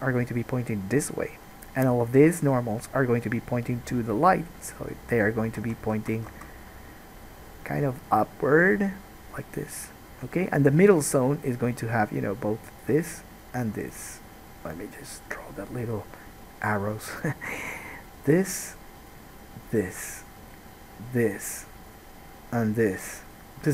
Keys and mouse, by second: 5.9 ctrl+z, 6.2 ctrl+z, 6.6 ctrl+z.